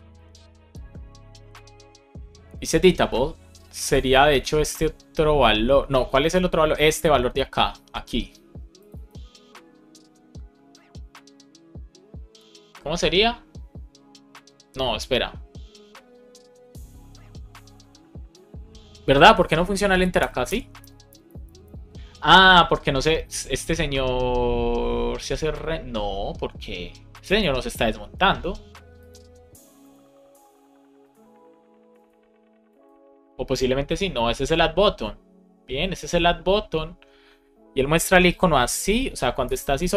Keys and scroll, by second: 20.1 Return, 20.7 Return, 39.3 BackSpace, 39.8 Escape.